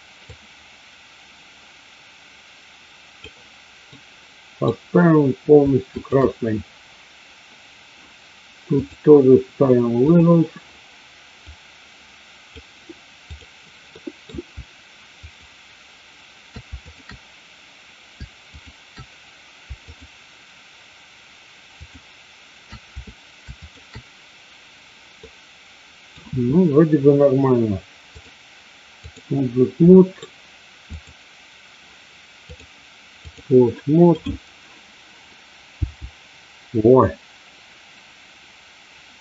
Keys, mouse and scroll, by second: 0.5-3.2 drag, 4.0 middle click, 5.8-6.8 shift+drag, 8.8-10.2 drag, 11.5-12.6 drag, 14.0 middle click, 15.2 shift+click, 16.8 shift+click, 18.5 shift+click, 19.8 shift+click, 21.7 shift+click, 23.5 shift+click, 25.1-26.1 middle drag, 28.1-29.2 drag, 29.8 middle click, 30.8 click, 32.3-33.3 drag, 34.2-35.0 drag, 35.7 g.